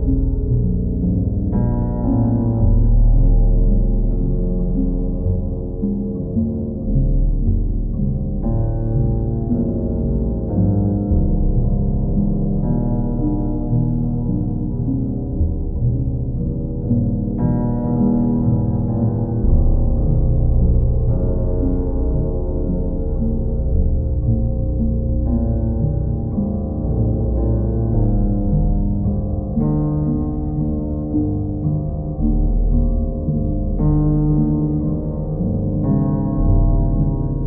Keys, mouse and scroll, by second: 1.4-2.5 drag, 3.9-4.9 drag, 6.0 alt+click, 9.2 click, 9.5 shift+click, 10.0 ctrl+click, 10.8 ctrl+click, 13.1 q, 14.6-15.6 right drag, 19.8-21.0 drag, 25.6-26.7 drag, 29.7-30.8 drag, 32.9-33.9 drag, 35.0-36.2 drag, 37.2 click.